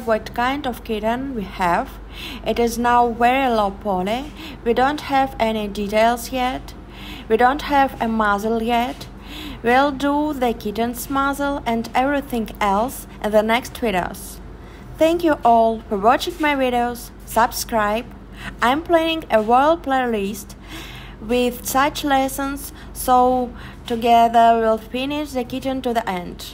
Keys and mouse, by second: 1.4 Tab, 5.6 click, 7.4 click, 9.6 middle click, 10.5 middle click, 10.8 middle click, 11.5 middle click, 19.5 h.